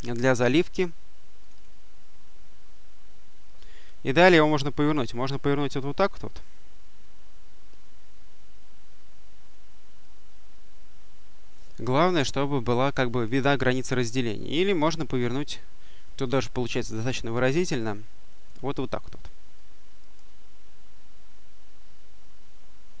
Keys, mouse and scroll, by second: 1.3 click, 3.3-5.3 drag, 6.2-10.3 drag, 12.1-13.0 drag, 14.7 click, 16.1 click, 17.3-18.8 drag, 19.4-23.0 drag.